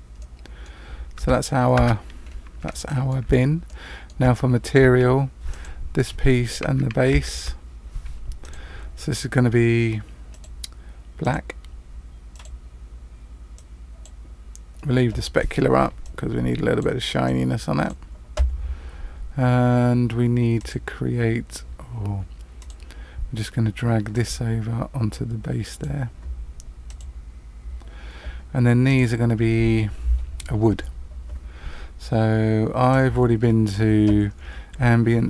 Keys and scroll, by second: 1.2 Tab, 1.7 Tab.